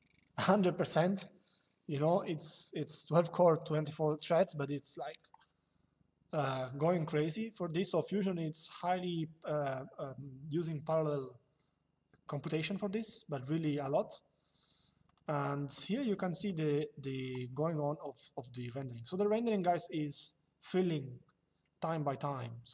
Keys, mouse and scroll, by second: 16.1 click.